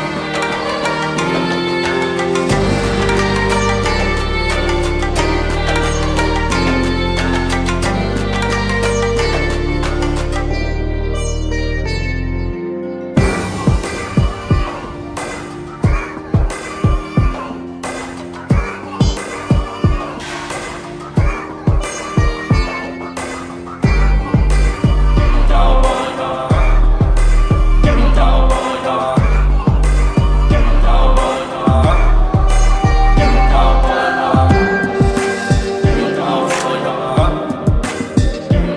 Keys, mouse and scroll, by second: 2.4 t, 4.8-6.4 drag, 14.7-18.9 drag, 21.2 alt+scroll down 1, 22.5-24.5 drag, 31.1-32.9 shift+drag, 33.4-34.9 shift+drag, 36.1-38.7 shift+drag.